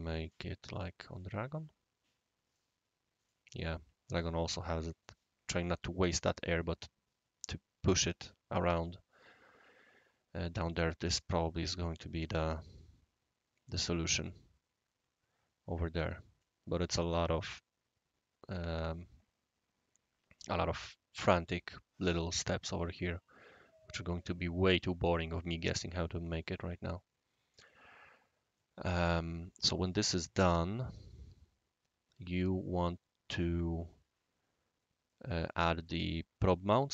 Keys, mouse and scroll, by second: 0.2 click, 1.1 click, 2.5-3.3 right drag, 3.6 scroll, 3.9-4.3 scroll up 2, 4.3 scroll, 4.7 scroll down 1, 4.7-5.5 middle drag, 5.2 scroll up 1, 5.3 scroll, 10.7-16.0 right drag, 16.4-16.8 middle drag, 25.0 click, 26.3-27.5 right drag, 27.9 scroll up 1, 28.0 scroll down 1, 28.5 middle drag, 29.3-30.8 right drag, 35.1-35.9 right drag.